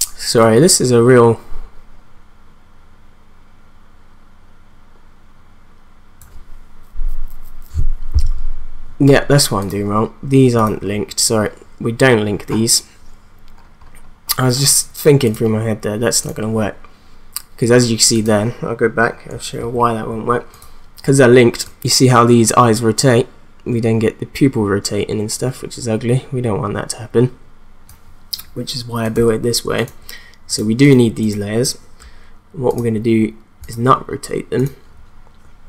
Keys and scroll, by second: 19.6 ctrl+z.